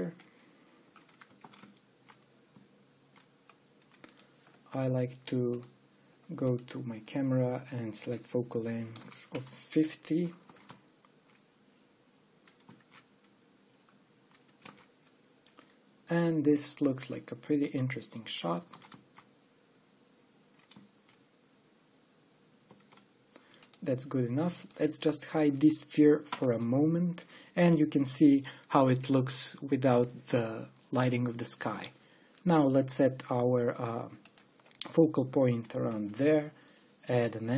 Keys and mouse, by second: 0.1 ctrl+alt+KP_0, 2.2 shift+f, 6.2-10.3 drag, 11.3 shift+f, 19.5 shift+f, 25.4 middle click, 26.2 right click, 27.1 h, 36.5 shift+a.